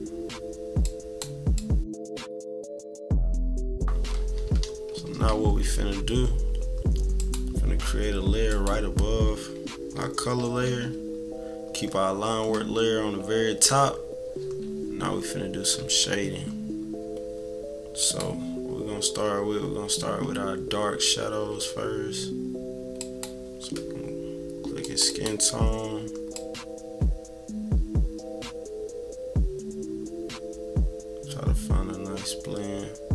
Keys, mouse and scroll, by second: 0.8 click, 1.5 click, 2.0 click, 2.8 click, 3.3 click, 3.6 click, 4.2 -, 4.5 -, 4.9 scroll up 2, 5.3 =, 7.2 click, 8.5-9.9 drag, 9.9 -, 10.3 =, 13.8 scroll down 2, 15.3 scroll down 2, 15.7 =, 15.8 scroll up 2, 16.1 =, 18.0 click, 21.2 =, 21.5 =, 22.9-24.3 drag, 24.8 click, 25.1 click, 26.3-29.5 drag.